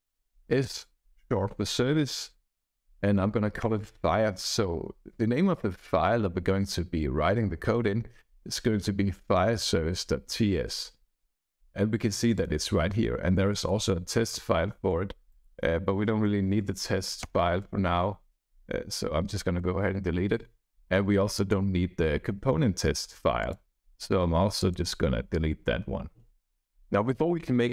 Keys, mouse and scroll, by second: 12.3 click, 13.5 right click, 15.3 click, 17.2 Return, 21.4 click, 23.4 click, 24.6 click, 26.4 BackSpace.